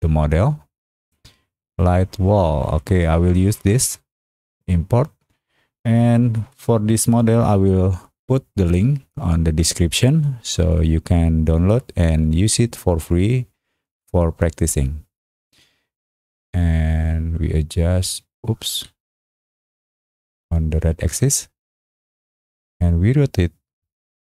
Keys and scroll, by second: 18.7 ctrl+z.